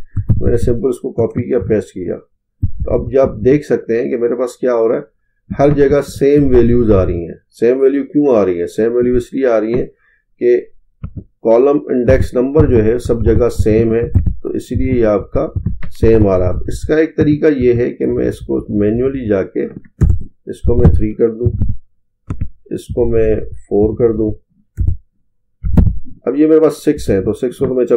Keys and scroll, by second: 1.6 ctrl+v.